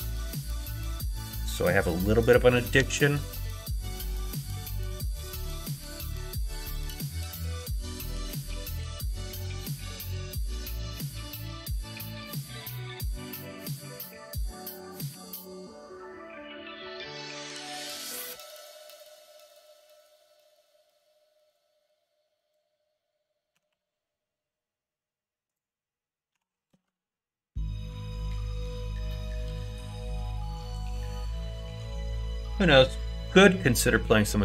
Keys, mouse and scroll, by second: 2.7 s, 9.7 ctrl+right click, 11.2 shift+middle click, 13.9 click, 15.1 r, 17.4 ctrl+z, 19.1 g, 21.9 click, 23.5 g, 26.3 r, 28.9 click, 29.7 click, 30.6 r.